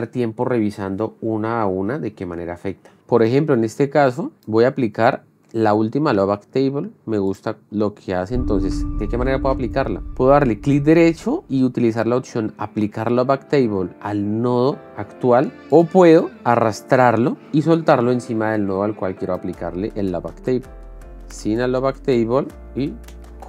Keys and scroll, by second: 5.9 space, 21.6 shift+f, 22.2 shift+d.